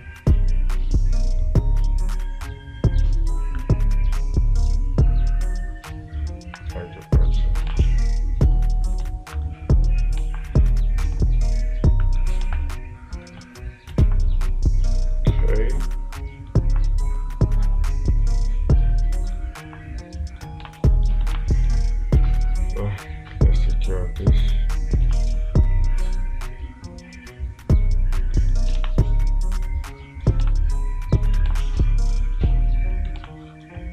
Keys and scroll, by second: 10.7 space, 12.9 space, 14.5 space, 21.1 space, 21.8 space, 29.2 space, 30.9 space, 31.9 space, 33.6 space.